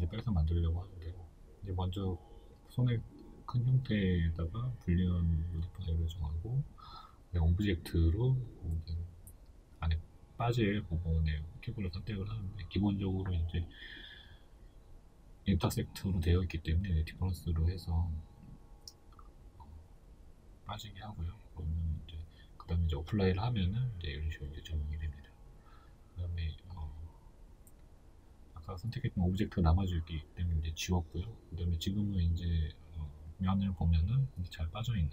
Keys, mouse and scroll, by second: 0.4-4.7 shift+middle drag, 4.7 click, 8.5-13.6 middle drag, 9.7-10.9 scroll up 2, 10.9-13.6 scroll up 1, 13.6-16.0 drag, 16.0 right click, 17.1 x, 17.7-20.2 middle drag, 18.4 scroll down 1, 20.2 right click, 20.5 Tab, 20.9 scroll up 1, 21.4-29.0 shift+middle drag, 25.3 k, 29.0 right click, 29.2-35.1 middle drag, 31.5 Tab.